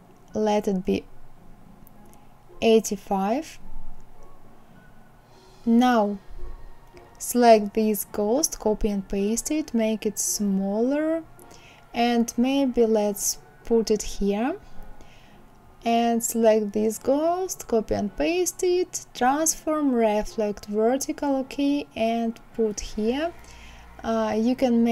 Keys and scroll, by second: 1.1 KP_8, 1.4 KP_5, 2.3 Return, 7.6 ctrl+c, 7.9 ctrl+v, 16.3 ctrl+c, 16.6 ctrl+v.